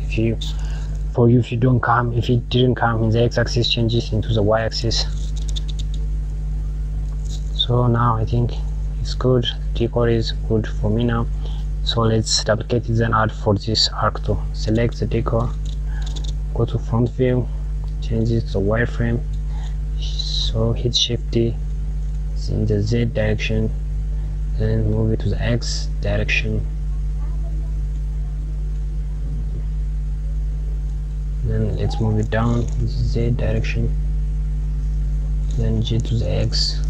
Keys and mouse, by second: 4.4 KP_Subtract, 5.4 click, 6.5 click, 14.2 click, 16.1 KP_1, 18.3 click, 20.7 shift+d, 34.2 KP_Add.